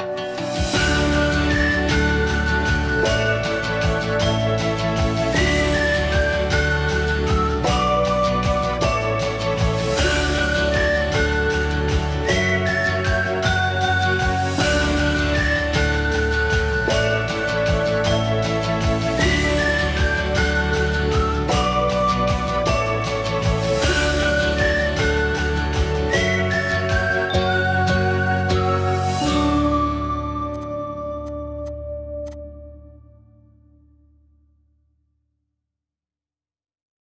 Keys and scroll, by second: 0.6 ctrl+g, 1.0 p, 6.4 Escape, 8.4-11.0 typing, 20.7 p, 22.8 Escape, 23.4 Escape, 30.1 ctrl+x, 32.1 Escape, 32.8 ctrl+s, 34.0 Escape.